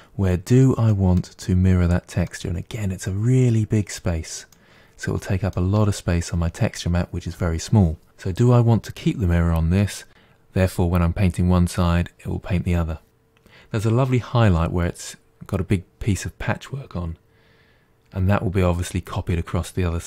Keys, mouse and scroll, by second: 0.7-7.4 middle drag.